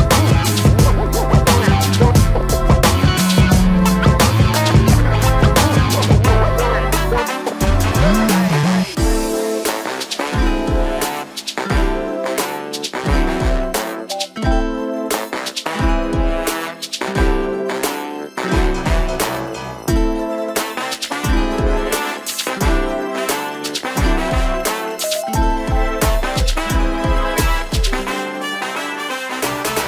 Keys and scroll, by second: 2.3 Delete, 6.7 f, 8.7 space, 9.3 f, 11.3 space, 12.9 shift+m, 16.3 s, 22.1 space, 22.2 Escape.